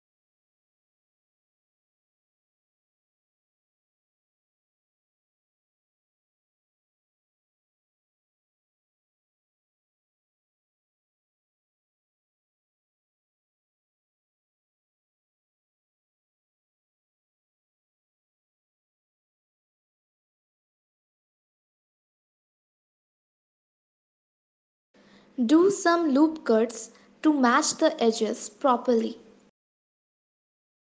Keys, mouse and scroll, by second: 0.7 shift+middle click, 1.0-1.9 shift+scroll up 4, 2.2 click, 3.6 shift+click, 4.4 d, 5.7 s, 10.6 click, 11.6 shift+middle click, 12.4-13.2 scroll up 6, 13.4 shift+middle click, 14.1-14.6 scroll up 2, 15.1 g, 22.8-23.1 scroll down 3, 23.9 shift+middle click, 27.6 ctrl+r.